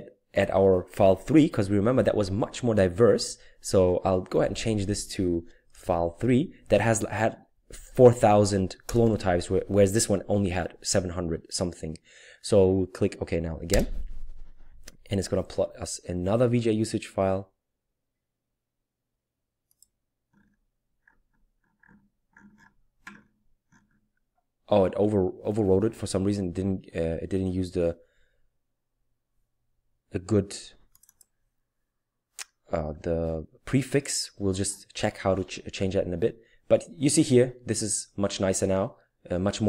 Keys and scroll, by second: 1.9 Up, 2.4 Left, 2.9-4.1 typing, 7.3-9.3 typing, 13.7 Return.